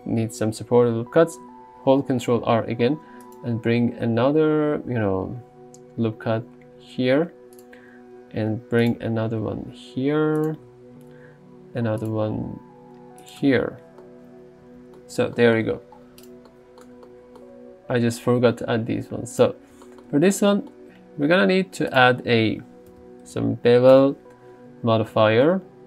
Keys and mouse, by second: 2.2 ctrl+r, 3.3 click, 7.6 click, 8.4 ctrl+r, 8.9-10.7 drag, 11.2 ctrl+r, 12.1-13.4 drag, 13.5 Tab, 19.4 click, 22.1 click.